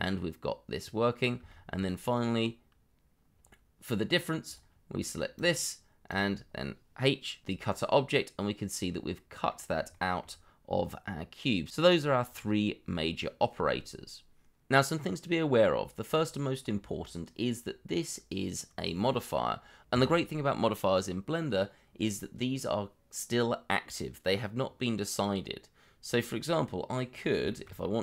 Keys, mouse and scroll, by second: 1.1 scroll down 1, 1.4 shift+middle click, 2.8 b, 2.9 o, 7.4 h, 7.7 middle click, 9.9 shift+middle click, 10.8 middle click, 13.1 middle click, 17.4-17.8 scroll up 1, 17.8 middle click, 19.0 shift+middle click, 19.5-19.9 scroll up 1, 19.9 middle click, 25.8-26.1 scroll down 1, 26.1 middle click, 27.1 scroll up 1, 27.4 shift+middle click.